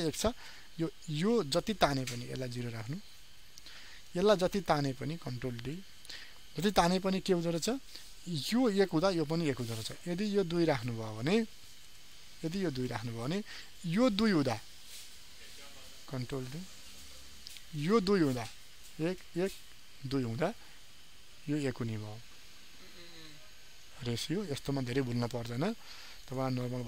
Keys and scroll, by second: 5.1 ctrl+d, 16.1 ctrl+d, 25.1 ctrl+d.